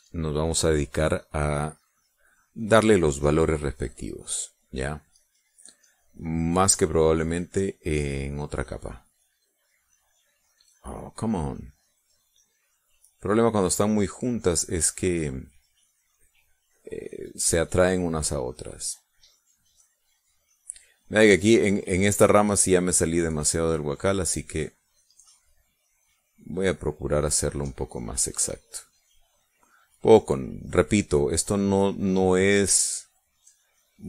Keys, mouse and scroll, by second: 0.0 click, 0.4 click, 0.8 click, 1.6 click, 2.3 click, 2.8 click, 3.3 click, 4.0 click, 4.4 click, 4.7 click, 5.0 click, 5.6 click, 5.9 click, 6.7 click, 7.4 click, 8.6 click, 9.1 click, 9.6 click, 11.6 click, 12.0 click, 12.6 click, 13.0 click, 13.4 click, 14.2 click, 15.0 click, 15.5 click, 16.2 click, 16.8 click, 17.4 click, 17.9 click, 18.5 click, 20.0 click, 20.9 click, 21.6 click, 22.1 click, 22.5 click, 23.0 click, 23.3 click, 23.8 click, 24.3 click, 24.7 click, 25.3 click, 25.8 click, 26.3 click, 26.7 click, 27.1 click, 27.5 click, 27.9 click, 28.3 click, 28.6 click, 29.0 click, 29.4 click, 29.8-32.3 drag, 32.5 click, 32.9 click, 33.3 click, 33.8 click.